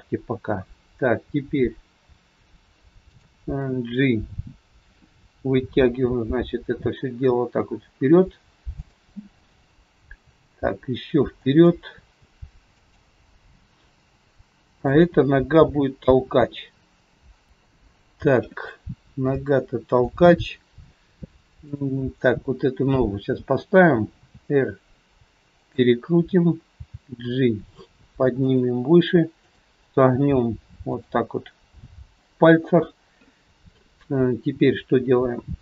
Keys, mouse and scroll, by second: 0.4-1.3 scroll down 3, 3.0 shift+click, 3.8-5.2 scroll down 1, 5.6 g, 12.6 click, 12.6 g, 15.6 click, 15.6 g, 18.7-19.2 scroll up 2, 19.3 shift+middle click, 19.3 shift+scroll up 1, 21.7 click, 22.4 scroll down 3, 24.2 r, 28.4 g, 29.4 click, 30.2 g, 32.2 scroll up 2.